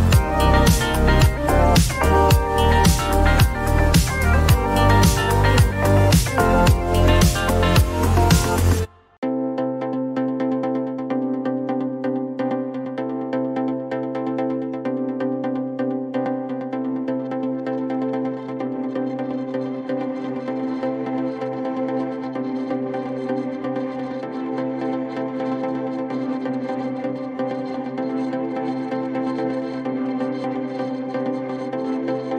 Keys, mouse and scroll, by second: 0.2 click, 0.7 typing, 1.0 Return, 5.1-12.0 drag, 9.2-11.3 typing, 13.0-15.0 drag, 17.4-20.8 drag, 22.0-23.4 drag, 25.9 click, 27.4 click, 28.2 click, 31.7 click.